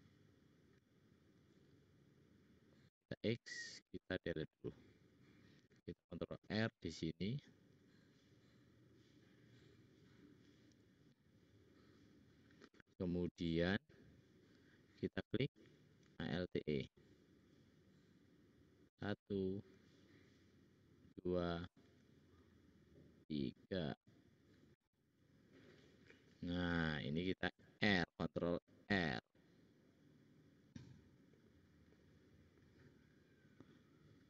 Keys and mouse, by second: 1.4-3.8 drag, 3.1 x, 6.1 ctrl+r, 11.6-13.5 drag, 14.6-16.0 drag, 16.1 alt+e, 19.5 alt+e, 21.9 alt+e, 24.9 middle click, 25.4 middle click, 27.2 ctrl+click, 27.6 ctrl+r, 32.0 middle click, 32.2 middle click, 32.3 middle click.